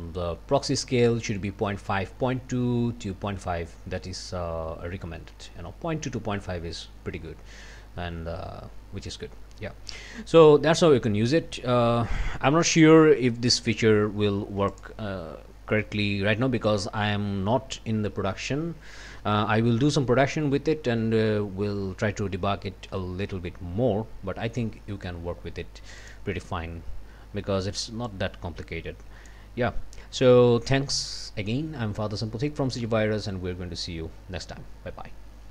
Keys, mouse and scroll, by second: 9.9-11.8 drag, 13.0 click, 14.7 click, 26.0 click, 28.1-29.5 drag, 30.3 click.